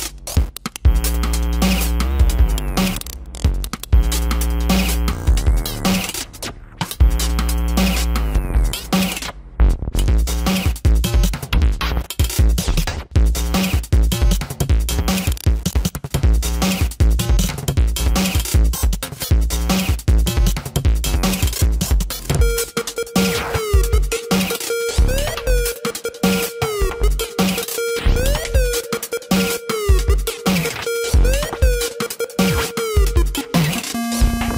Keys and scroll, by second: 1.5 space, 2.5 ctrl+-, 2.8 space, 3.8 ctrl+-, 5.2 ctrl+-, 6.3 ctrl+-, 12.4 ctrl+-, 13.1 ctrl+-, 13.3-15.4 typing, 19.7 ctrl+alt+z, 20.1 space, 20.8 space, 21.5 ctrl+alt+z, 21.9 ctrl+alt+z, 23.6 space, 24.1 space, 25.3 ctrl+=, 26.7 ctrl+=, 27.2 space, 28.1 space, 30.3 ], 32.4 ctrl+alt+z, 33.4 space.